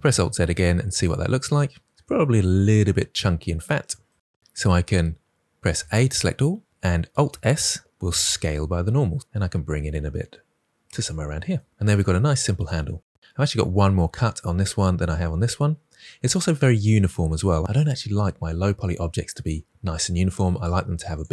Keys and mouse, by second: 0.3 middle click, 5.7 a, 7.0 alt+s, 17.6 ctrl+z.